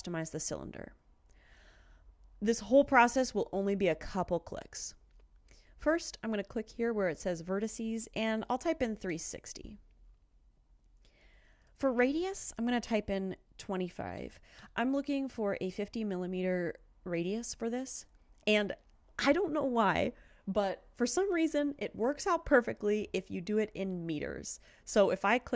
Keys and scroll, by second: 8.4-9.1 typing, 14.0-14.7 typing.